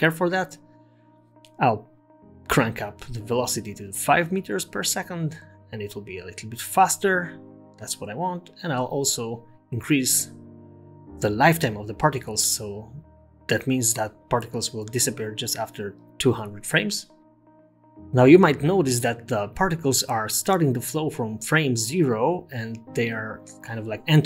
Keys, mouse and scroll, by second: 1.1 click, 3.4 click, 5.8 space, 8.8 space, 13.0 click, 14.4 0, 15.5 space, 19.2 space, 20.2 middle click, 21.0 scroll up 2, 21.4-21.8 scroll down 4, 22.1 Tab, 23.1 s, 23.7 Tab, 24.0 space.